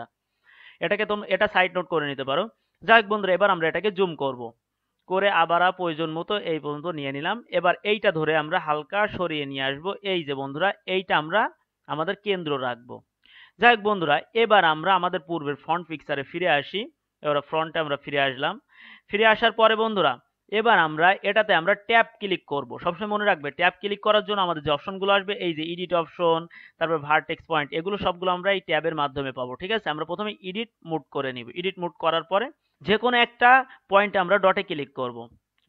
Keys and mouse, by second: 3.6-8.1 middle drag, 8.1-10.6 drag, 16.4-18.1 drag, 18.1 middle click, 18.8-31.4 middle drag.